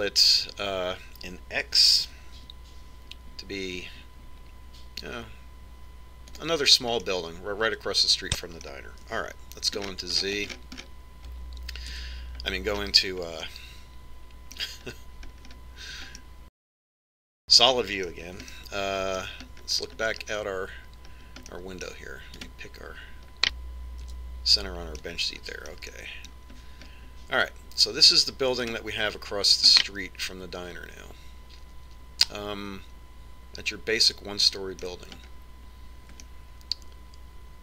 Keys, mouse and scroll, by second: 4.0 s, 9.0-10.7 middle drag, 11.1 z, 11.8-15.4 middle drag, 13.9 KP_5, 16.2-18.1 middle drag, 21.2-22.6 middle drag, 22.8-24.3 middle drag, 23.5 right click, 25.3 KP_Decimal, 26.1-27.9 middle drag, 28.7-29.9 middle drag, 29.9 right click, 30.8-32.5 middle drag, 36.3-37.4 scroll up 1, 37.4-37.6 middle drag.